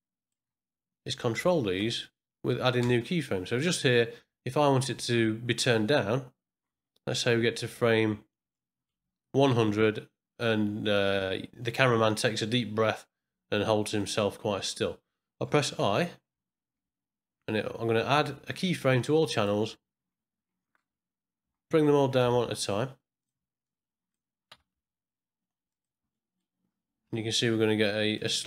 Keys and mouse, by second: 1.6 shift+click, 2.8 space, 7.3 middle click, 8.5 middle click, 14.0 click, 16.9 i, 21.4 n, 22.2 g, 23.6-24.2 drag, 24.5 g, 26.2 middle click, 28.1 click.